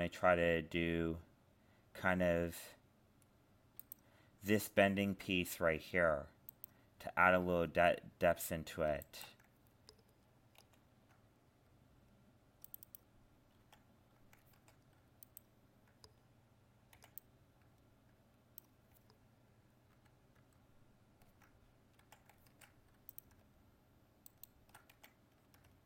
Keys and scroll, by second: 10.6 ctrl+r, 14.6 ctrl+Tab, 19.9 ctrl++, 22.6 ctrl+Tab.